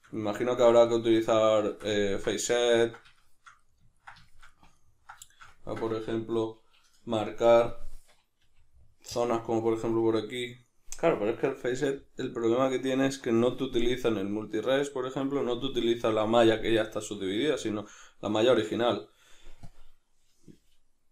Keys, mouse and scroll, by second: 7.7-8.9 drag, 8.4 f, 9.1-21.1 drag.